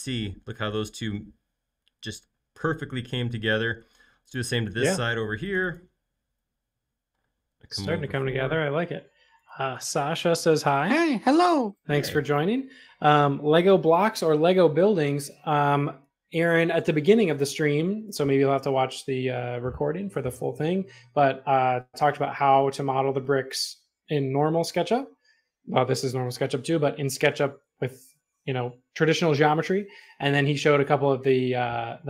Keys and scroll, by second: 7.6 |, 11.5 space, 12.0 m, 15.2 e.